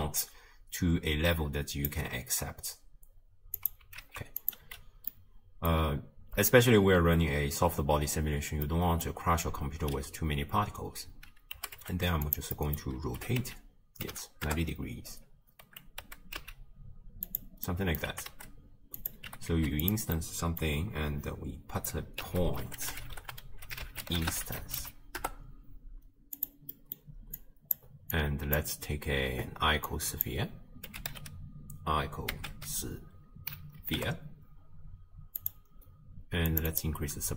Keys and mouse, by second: 3.7 click, 4.1 ctrl+x, 4.4 click, 4.6 m, 5.2 click, 8.7 click, 11.6 g, 12.6 drag, 13.2 r, 16.1 g, 17.7 click, 19.3 g, 20.2 click, 22.2 ctrl+a, 24.8 Down, 26.8 click, 27.4 click, 28.2 click, 29.9-35.5 drag, 36.5 click, 36.7 click.